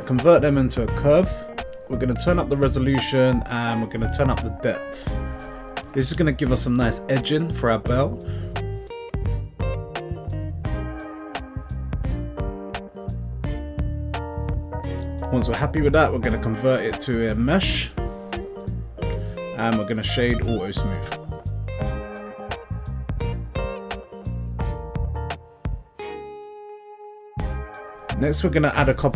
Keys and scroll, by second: 23.5 Tab.